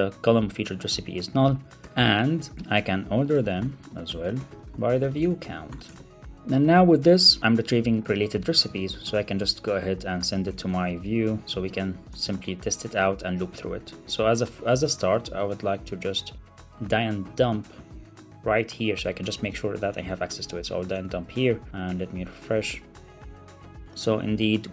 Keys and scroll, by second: 1.7 super+BackSpace, 2.5 Return, 6.2 alt+super+l, 6.2 super+s, 8.2 shift+Right, 8.4 super+c, 10.3 alt+Left, 10.5 alt+shift+Right, 10.6 super+v, 11.0 super+Right, 11.1 Left, 11.6 super+v, 12.1 alt+super+l, 12.3 super+s, 13.4 super+c, 14.7 ctrl+Tab, 15.5 ctrl+Tab, 19.0 super+Right, 19.2 Up, 19.4 super+Right, 19.6 Return, 20.8 super+v, 23.2 super+r.